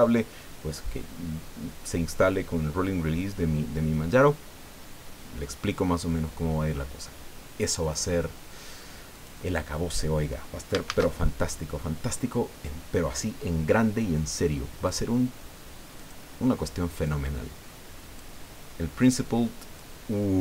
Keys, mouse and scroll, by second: 7.8 click, 9.1 click, 10.9 shift+a, 14.9 click, 16.0 click, 17.0-18.4 drag, 19.0-20.0 drag.